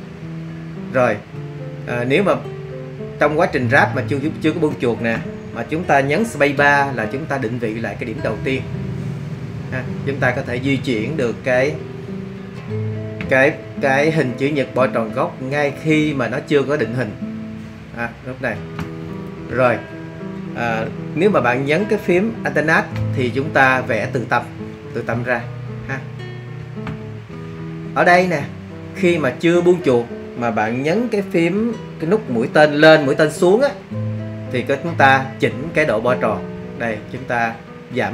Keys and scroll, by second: 6.5 shift+space, 36.1 alt+Down.